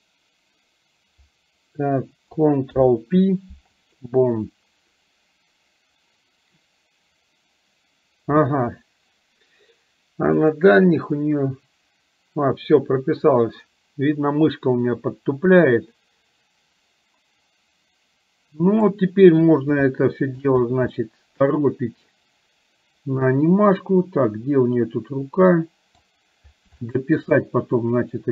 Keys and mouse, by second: 2.7 ctrl+p, 10.7 click, 11.6-19.2 drag, 20.1 shift+middle click, 20.9-26.1 middle drag, 26.9 shift+middle click, 27.3-28.3 middle drag.